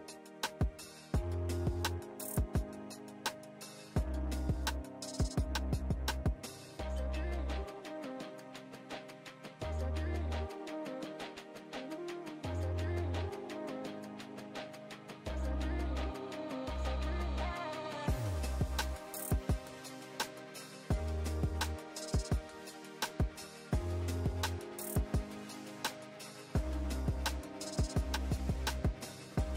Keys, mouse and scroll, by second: 2.0-3.9 click, 8.2 ctrl+space, 8.3 ctrl+click, 8.5-8.8 ctrl+space, 9.1 click, 9.2 space, 9.6 click, 10.9-11.4 drag, 13.2 space, 13.3-13.7 click, 13.5 space, 14.1 click, 15.6-16.1 click, 17.4-19.1 alt+drag, 19.1 click, 19.3 ctrl+space, 19.3-19.8 ctrl+click, 19.6 ctrl+space, 20.1 click, 20.4-21.7 alt+drag, 22.2 space, 22.3 click, 22.4-23.6 space, 23.6 space.